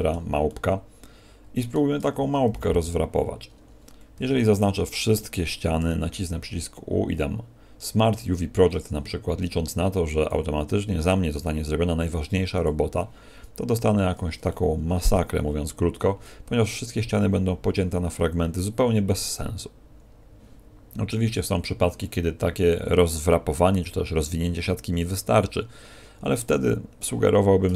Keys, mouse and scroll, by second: 1.9 Tab, 2.5 a, 3.4 scroll up 1, 3.8 scroll down 1, 4.1 scroll down 1, 4.1 a, 5.7 u, 13.5-14.5 scroll up 6, 14.5 shift+middle click, 15.3 a.